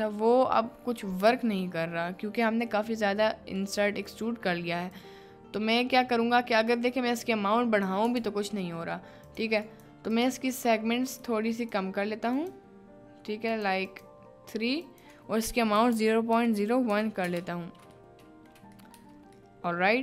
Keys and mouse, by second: 0.0-0.5 middle drag, 1.3 ctrl+z, 3.7 middle click, 4.9-7.9 drag, 8.2 ctrl+z, 9.2 click, 11.1 click, 12.4 click, 13.9 click, 14.8-17.2 drag, 18.1 middle click, 19.0 Tab, 19.5 middle click.